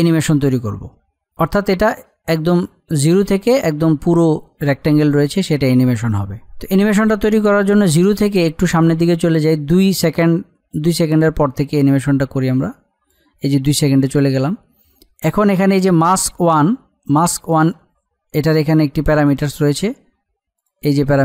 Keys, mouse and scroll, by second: 8.9-20.4 drag, 20.5 click.